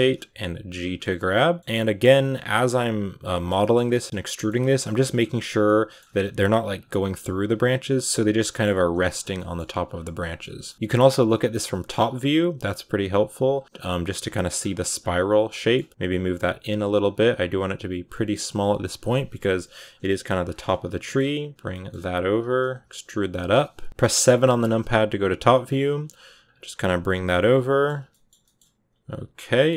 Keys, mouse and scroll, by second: 0.2 g, 0.9 middle click, 1.5 g, 1.6 scroll up 3, 1.7 middle click, 2.5-3.0 scroll up 1, 3.0 right click, 3.2-4.4 shift+middle drag, 4.4 scroll up 3, 4.6 g, 5.2 r, 5.5 middle click, 5.9 g, 6.9 g, 8.2 scroll down 2, 8.3 middle click, 8.6-13.4 typing, 9.2 middle click, 10.3 middle click, 13.6-14.2 scroll down 3, 13.6 middle click, 14.2 middle click, 14.4 scroll up 4, 14.6 g, 15.2 right click, 15.4 middle click, 15.7 g, 17.1 g, 17.8 right click, 18.0 middle click, 18.8-22.7 typing, 20.5 middle click, 21.6 middle click, 23.2 middle click, 24.0-24.6 scroll up 5, 24.7-26.7 typing, 27.2 middle click, 27.8 scroll down 4, 27.9 shift+middle click, 28.7 r, 29.2 g, 29.4 middle click, 29.6 e.